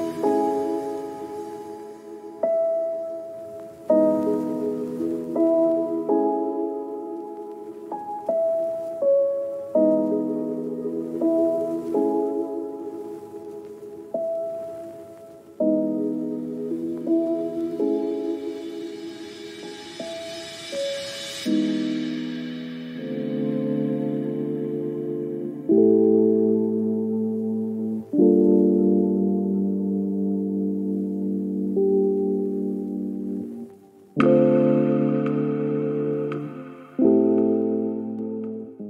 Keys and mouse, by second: 0.1 ctrl+click, 0.6 click, 0.8 ctrl+z, 1.0 click, 1.3 ctrl+click, 2.3 click, 2.7 middle click, 2.9 middle click, 3.0 click, 3.5 shift+middle click, 3.6 shift+middle click, 3.8 shift+middle click, 10.8 shift+middle click, 13.0 shift+middle click, 13.2 shift+middle click, 14.3 click, 14.4 s, 14.8 click, 15.0 click, 15.2 click, 15.4 click, 15.7 s, 16.2 s, 16.8 s, 17.0 click, 17.2 click, 17.5 click, 17.7 shift+middle click, 17.8 click, 17.9 click, 18.3 click, 18.9 shift+middle click, 19.1 click, 19.7 r, 20.2 middle click, 20.3 middle click, 20.6 middle click, 20.8 click, 21.3 r, 21.7 click, 22.1 r, 22.3 click, 22.4 click, 22.6 click, 22.8 middle click, 22.9 shift+middle click, 23.4 click, 23.7 r, 24.2 click, 24.5 click, 24.6 click, 24.8 click, 25.3 click, 25.5 middle click, 25.7 r, 26.5 middle click, 26.6 click, 26.9 click, 27.3 click, 27.5 click, 27.9 s, 28.0 click, 28.7 shift+middle click, 29.2 shift+middle click, 29.4 shift+middle click, 30.7 click, 30.8-32.0 right drag, 32.2 click, 32.4 click, 32.5 shift+middle click, 32.7 click, 33.4 shift+middle click, 33.7 shift+middle click, 34.1 click, 35.3 shift+middle click, 35.5 shift+middle click, 36.3 shift+middle click, 36.7 click, 36.9 r, 37.2 middle click, 37.4 click, 37.6 click, 37.7 click, 37.9 middle click, 38.0 shift+middle click, 38.2 click, 38.8 middle click.